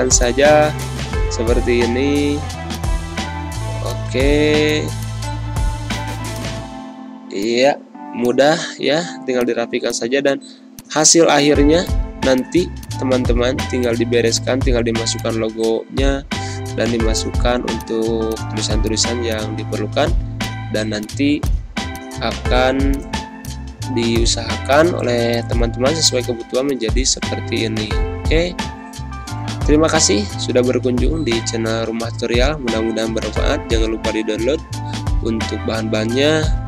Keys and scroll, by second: 8.9 ctrl+g, 11.4 ctrl+g, 13.1 Delete, 16.4 ctrl+g, 27.7 ctrl+-.